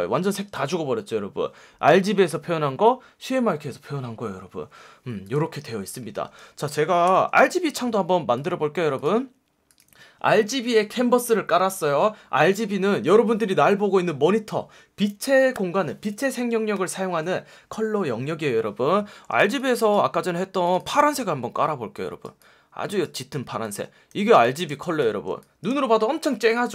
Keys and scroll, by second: 7.0 super+n, 24.1 v, 24.6 space, 25.2 space.